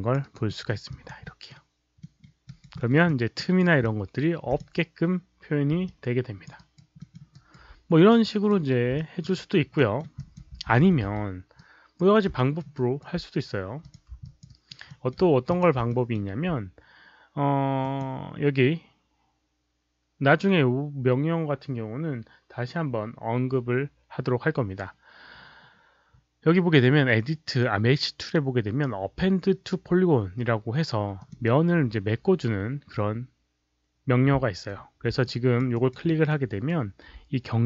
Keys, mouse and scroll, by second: 0.1 alt+right click, 0.3 Return, 0.3 KP_2, 0.3 KP_0, 0.3 KP_1, 0.4 alt+middle click, 0.8 alt+click, 1.2 alt+middle click, 1.9 alt+middle click, 2.4 alt+right click, 2.7 alt+middle click, 3.0 alt+click, 3.3 alt+right click, 3.7 alt+click, 3.7 alt+middle click, 5.1 alt+click, 5.1 alt+right click, 5.1 alt+middle click, 5.8 alt+click, 6.4 alt+middle click, 6.5 alt+right click, 6.9 alt+middle click, 7.2 alt+right click, 8.0-8.4 right drag, 8.9 alt+click, 9.3 alt+right click, 9.7 alt+middle drag, 10.1 alt+click, 10.4 z, 11.0 z, 11.5-11.9 right drag, 12.3 alt+middle click, 12.7 alt+right click, 13.7 click, 14.2 alt+click, 14.4 alt+right click, 14.8 alt+middle click, 15.4 click, 15.4 right click, 15.4 z, 15.8 alt+middle click, 17.7 click, 31.1 click, 35.2 alt+click, 35.6 alt+right click, 36.0 alt+middle click, 36.4 alt+right click.